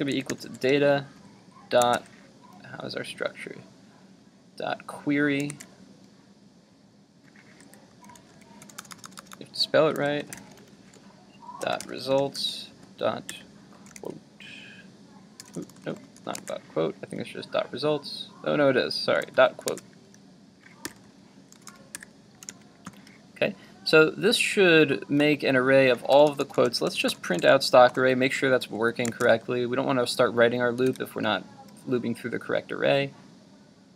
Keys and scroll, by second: 1.8 super+Tab, 5.5 super+Tab, 16.4 super+Tab, 19.7 super+Tab, 19.8 super+Tab, 28.6 super+s, 29.2 super+Tab, 31.0 super+r.